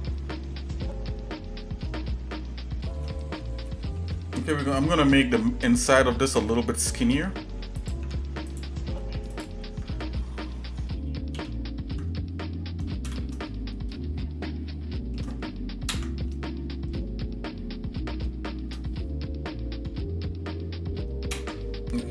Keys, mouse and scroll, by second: 3.0 middle click, 3.7 shift+middle click, 4.4 click, 7.8 click, 8.0 Tab, 8.5 click, 9.3 alt+shift+click, 11.3 ctrl+KP_9, 13.0 shift+KP_Add, 13.9-15.2 shift+middle drag, 15.9 ctrl+KP_Add, 17.0-18.3 shift+middle drag, 21.4 ctrl+KP_Add.